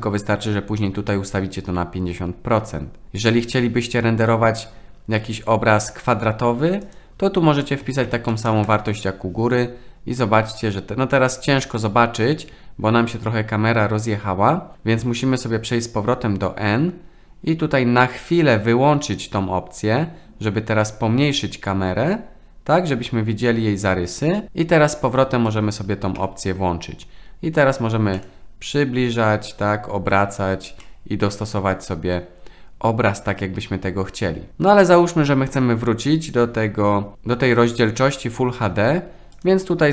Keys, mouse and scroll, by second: 0.6-3.4 drag, 6.9-9.3 drag, 15.2 n, 18.1 click, 25.5 click, 26.2 n, 28.1-30.1 middle drag, 30.8-32.1 middle drag, 39.5-39.9 drag.